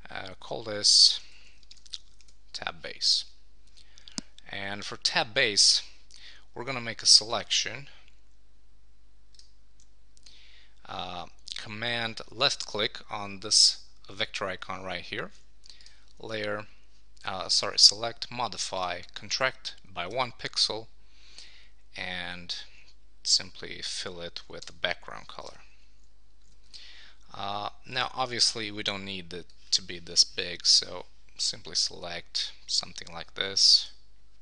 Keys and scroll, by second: 2.2 Return, 20.0 Return, 24.6 super+BackSpace.